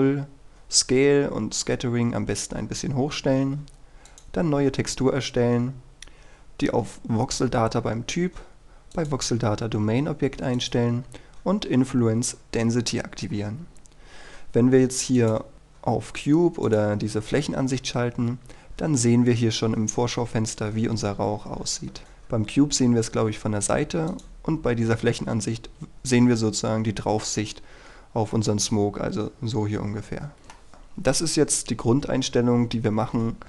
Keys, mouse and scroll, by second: 3.2-4.2 scroll up 1, 4.2 click, 4.9-6.2 scroll up 1, 6.2-8.3 scroll down 1, 9.1 click, 11.2-13.7 scroll down 1, 13.7-15.3 scroll up 1, 15.3 click, 18.0-18.4 scroll up 1, 18.4-21.5 scroll down 1, 22.0 click, 28.0 Escape, 28.5-30.7 middle drag, 30.7-33.4 scroll up 1.